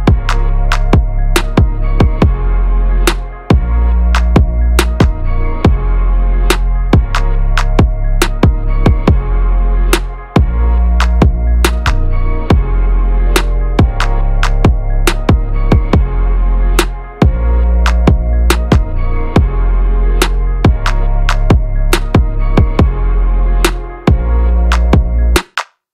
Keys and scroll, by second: 11.5 ctrl+v, 11.9 ctrl+a.